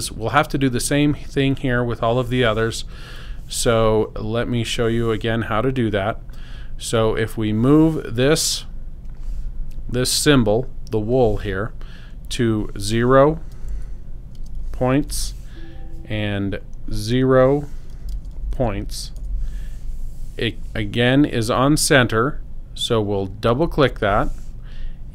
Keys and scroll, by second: 13.6 0, 14.3 space, 14.6 p, 15.0 t, 17.7-19.0 typing, 19.2 Return.